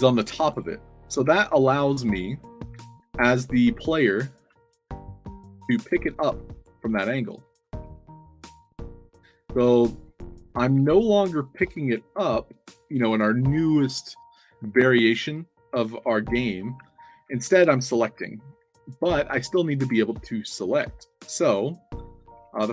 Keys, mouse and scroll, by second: 0.2-0.9 typing, 1.2 Tab, 2.4-13.8 typing, 15.6-20.1 typing, 20.9 Tab, 22.1 c, 22.3 c.